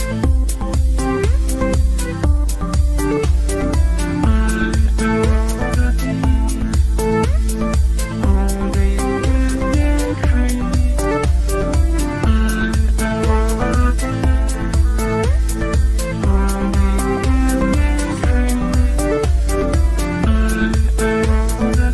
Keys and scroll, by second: 5.3 shift+F2, 5.5 Escape, 6.6 ctrl+r, 6.9 ctrl+r, 7.2 ctrl+r, 7.7 Escape, 15.3 Delete, 16.6-18.4 typing, 18.5 ctrl+k, 20.0 ctrl+q.